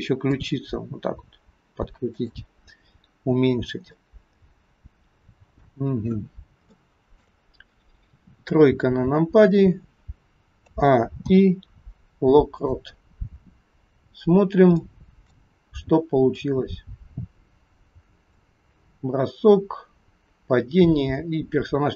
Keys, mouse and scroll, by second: 0.4 click, 1.1 r, 3.7-4.0 scroll down 2, 4.0 middle click, 6.0-6.6 scroll down 1, 6.8 shift+middle click, 7.5-8.4 scroll down 2, 8.4 scroll down 1, 8.4 KP_3, 9.0-9.7 scroll up 2, 9.7-10.5 scroll down 1, 10.7 a, 11.3 i, 14.3-14.9 scroll down 2, 14.9 shift+middle click, 16.5 click.